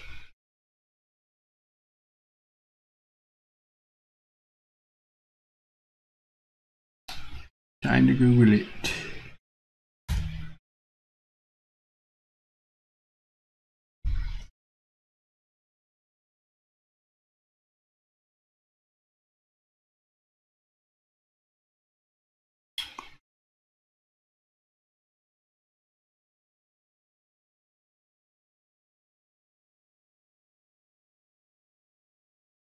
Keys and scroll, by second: 6.7 super+c, 7.5 super+c, 9.8 super+v.